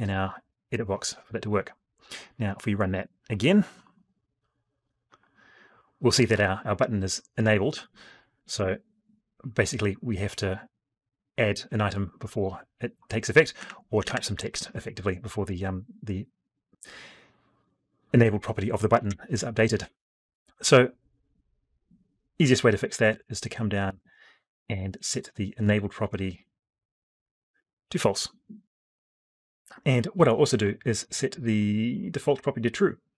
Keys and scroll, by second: 18.8 F12.